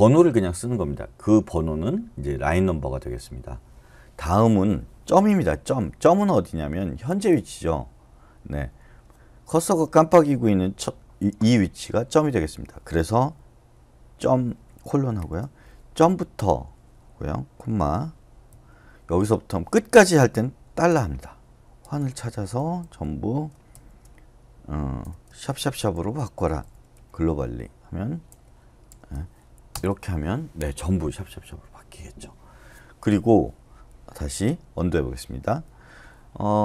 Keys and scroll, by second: 15.2-16.0 typing, 18.5 ', 20.7-23.7 typing, 25.0-28.9 typing, 29.7 Return, 34.7 u.